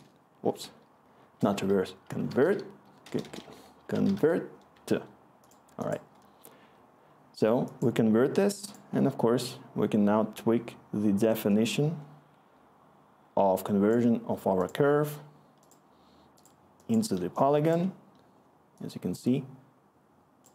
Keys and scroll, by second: 0.0-4.6 typing, 4.7 Return, 17.6 scroll.